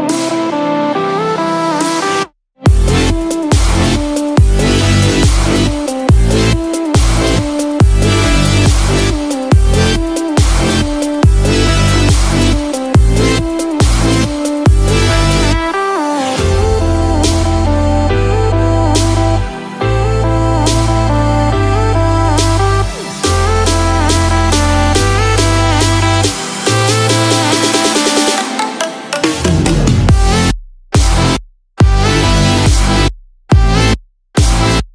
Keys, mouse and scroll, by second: 0.8 click, 1.6 space, 4.0 KP_0, 4.6 KP_0, 6.2 click, 14.2 click, 28.4 click, 34.3 KP_0.